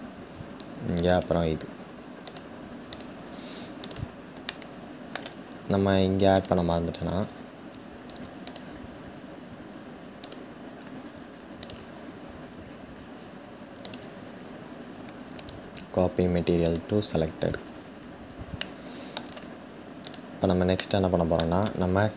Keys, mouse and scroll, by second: 2.6 click, 4.3-6.1 middle drag, 6.1 click, 7.0-7.8 scroll up 6, 8.1 shift+click, 16.3 click, 17.0-18.2 scroll down 3, 18.2-19.7 shift+middle drag, 19.7 click, 20.4-22.1 shift+middle drag.